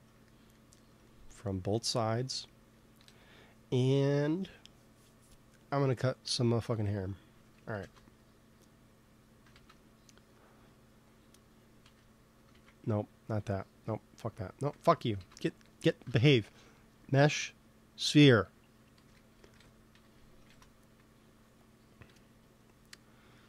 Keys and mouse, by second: 0.2-1.8 drag, 2.1 ctrl+s, 3.0 KP_1, 6.3-8.2 drag, 7.7 shift+s, 9.4 shift+a, 11.1-12.8 drag, 11.7 x, 12.4 shift+a, 14.6 x, 15.1 shift+s, 16.0 shift+a, 18.9 r, 20.4 ctrl+s, 22.1 KP_3.